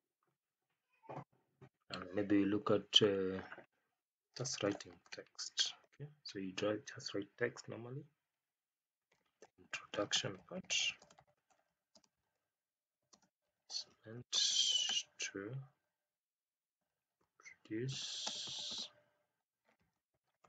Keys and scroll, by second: 5.0 space, 10.9 space, 11.9 space, 13.1 space, 14.3 space, 14.7 space, 18.2 space, 18.6 space, 19.9 space.